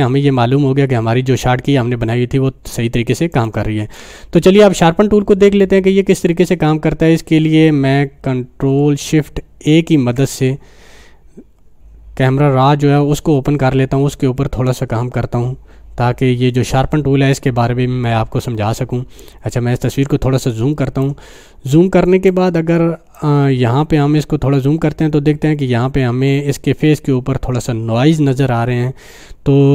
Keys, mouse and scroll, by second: 3.3 click, 3.4-6.8 drag, 5.0-6.6 drag, 6.8 scroll up 1, 7.4 scroll down 1, 9.9 ctrl+shift+a, 19.5 click, 19.5-21.1 drag, 21.2 scroll down 1, 21.8 scroll up 1, 22.3-23.2 drag.